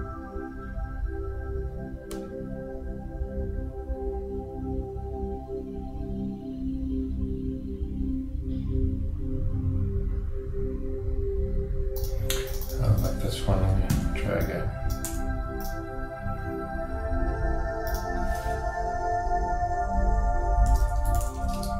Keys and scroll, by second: 14.0 super+d, 15.1 super+Return, 20.7 shift+r.